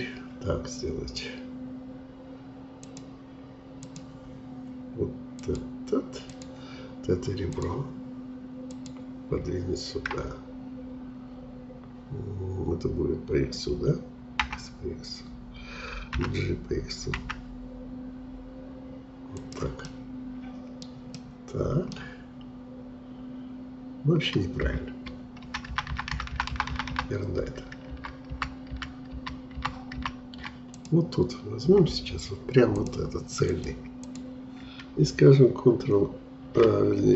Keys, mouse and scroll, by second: 2.8-11.7 drag, 14.4 x, 16.1 g, 19.9-24.1 middle drag, 25.4 ctrl+z, 25.7 ctrl+z, 25.8 ctrl+z, 26.1 ctrl+z, 26.3 ctrl+z, 26.5 ctrl+z, 26.7 ctrl+z, 26.9 ctrl+z, 28.3 ctrl+z, 28.6 ctrl+z, 29.5 ctrl+z, 29.9 ctrl+z, 30.7-36.9 drag.